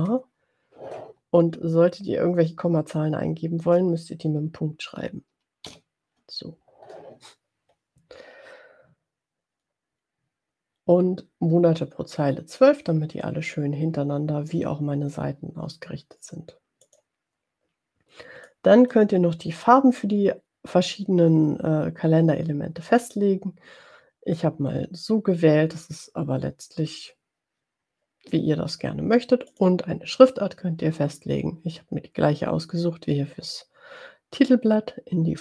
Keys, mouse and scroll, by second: 3.8 BackSpace, 16.9 click, 18.5 click, 29.6 click.